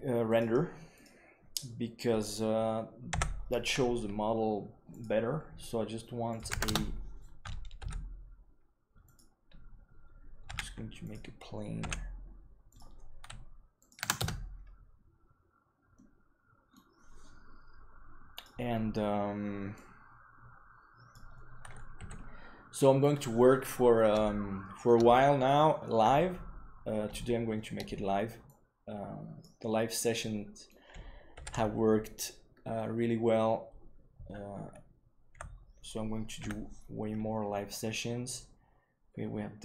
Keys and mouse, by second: 3.1 n, 4.8 click, 6.3 click, 7.7 s, 10.4 s, 11.7 g, 13.8 click, 15.9-16.7 middle drag, 18.3 click, 19.7-21.1 drag, 21.9 KP_3, 24.2-24.8 shift+middle drag, 27.1-27.5 shift+middle drag, 28.5 click, 30.1-30.6 middle drag, 31.6 ctrl+s, 35.3 n, 36.3 KP_1.